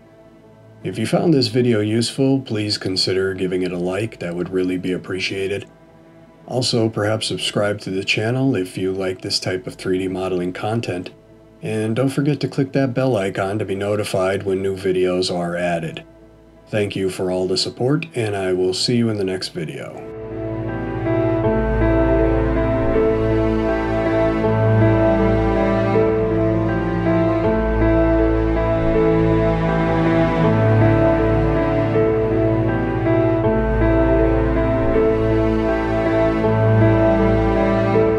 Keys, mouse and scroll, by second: 14.9-15.4 scroll down 1.